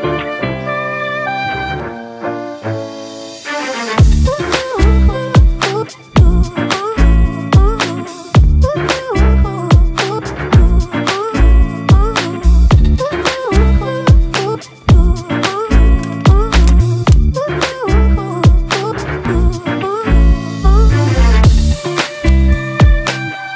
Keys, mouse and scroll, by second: 0.5-1.9 typing, 1.1 double click, 2.3 double click, 10.3 right click, 12.4 double click, 18.4 right click, 19.6 double click, 22.6 ctrl+z.